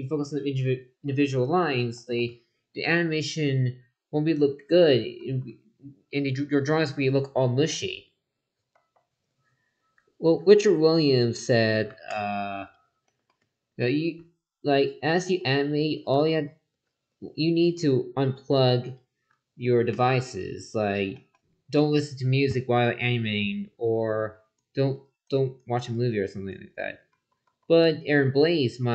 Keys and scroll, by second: 5.2 ctrl+z, 8.7 ctrl+z, 15.1 ctrl+z, 27.1 ctrl+z.